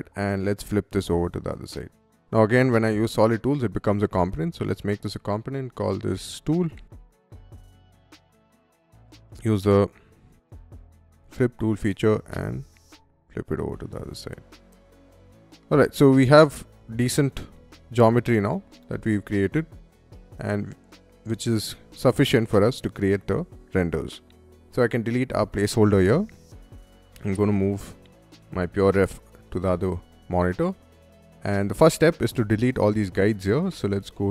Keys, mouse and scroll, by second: 0.5 scroll down 1, 1.0 middle click, 1.7-2.0 scroll up 1, 4.1 click, 6.1-7.9 typing, 7.9 click, 8.4 click, 10.2 shift+s, 10.9 click, 10.9 f, 11.9-14.5 ctrl+drag, 14.6 middle click, 14.8 space, 15.0 middle click, 15.6 click, 15.8 click, 16.0 click, 17.3 Escape, 17.3 click, 17.5 click, 18.0 Escape, 18.5-20.4 middle drag, 21.1-22.3 middle drag, 22.6 middle click, 23.3 middle click, 24.2 click, 24.5 middle click, 25.1 Delete, 28.0-32.6 right drag, 33.5 click.